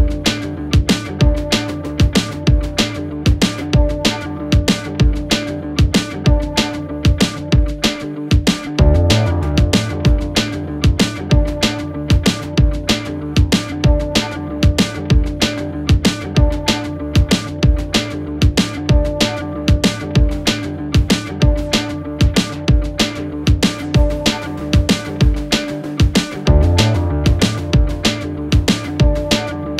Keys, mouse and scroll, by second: 1.6 click, 1.9-2.6 scroll up 3, 2.6-3.3 scroll up 1, 3.3 click, 4.8 shift+click, 5.4 shift+click, 5.6 shift+click, 6.3 click, 7.7 g, 9.6 click, 10.4 ctrl+z, 10.7-11.2 scroll down 2, 11.2 shift+click, 12.8 shift+click, 13.4 shift+click, 13.9 shift+click, 14.1 shift+click, 14.8 shift+click, 15.8 shift+click, 16.3 shift+click, 16.9 click, 18.0 shift+click, 18.3 middle click, 18.3-19.0 scroll up 1, 19.0 shift+click, 19.4 shift+click, 19.8 shift+click, 20.0-20.7 scroll down 2, 20.7 shift+click, 21.2 shift+click, 21.4 shift+click, 21.6-22.2 scroll down 2, 22.2 click, 24.0-24.5 scroll up 1, 24.5 g, 26.0 click, 26.5 click, 27.4 Tab, 27.7 scroll down 2, 27.9 scroll up 1, 28.1 Tab, 28.8 ctrl+z, 29.0 ctrl+z.